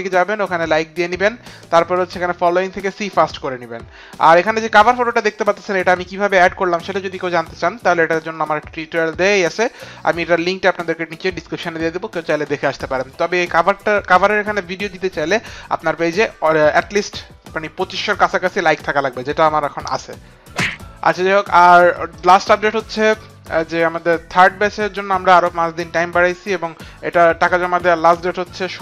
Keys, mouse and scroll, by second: 8.3 click, 12.7 click, 21.5 click, 22.2 click.